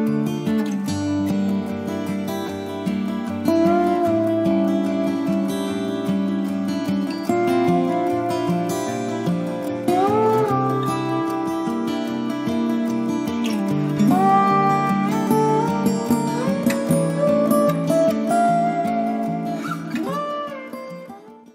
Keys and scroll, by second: 1.0 ctrl+0.